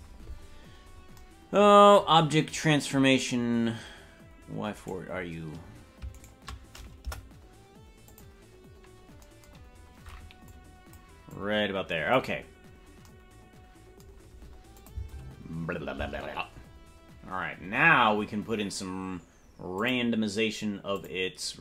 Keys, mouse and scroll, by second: 0.5-1.1 scroll up 7, 2.4-4.2 scroll up 5, 4.8-5.9 right drag, 7.0 Delete, 10.5 click, 11.3 click, 12.5-13.1 scroll down 4, 14.8 click, 15.0 space, 16.0 space, 19.7 click, 20.9 click.